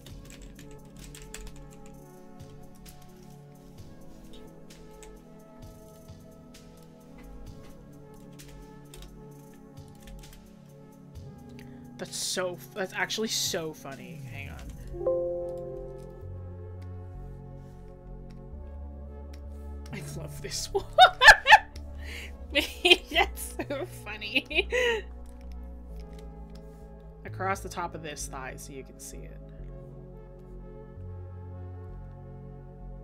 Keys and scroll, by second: 25.2 scroll up 1.